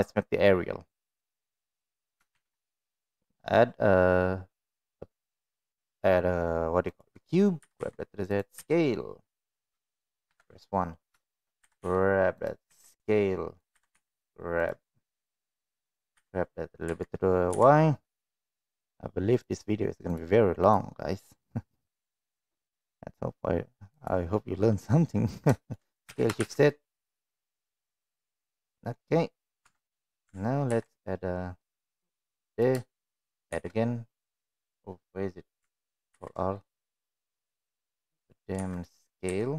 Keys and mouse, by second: 2.3 shift+a, 7.5 g, 8.5 s, 10.3 KP_1, 11.2 shift+middle click, 11.6 g, 12.6 s, 13.7 g, 15.0 middle click, 16.1 g, 20.6-22.0 drag, 22.3 middle drag, 23.8 click, 26.0 s, 28.8 middle click, 29.6 Tab, 30.6 ctrl+r, 33.5 shift+r, 36.1 ctrl+r, 38.5 3, 38.8 click, 39.3 s.